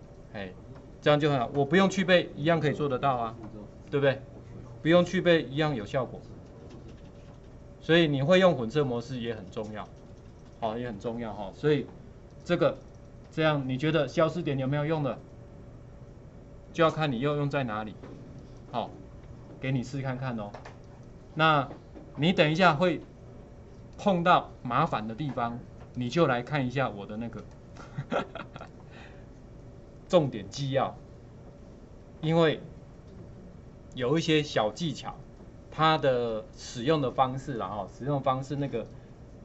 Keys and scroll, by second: 3.2 ctrl+4.